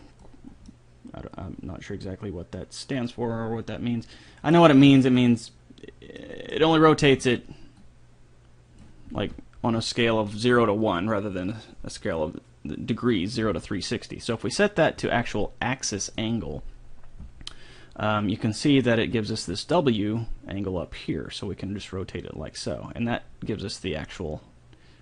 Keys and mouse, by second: 0.9-2.7 middle drag, 5.5-8.0 middle drag, 8.0-9.5 drag, 9.4 ctrl+z, 14.8-16.6 drag, 19.6-21.5 drag.